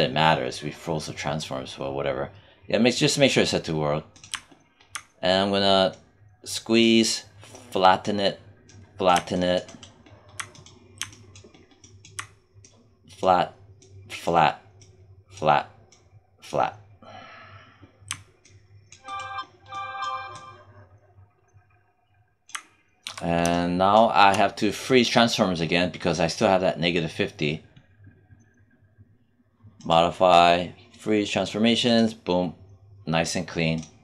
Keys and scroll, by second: 22.9 w.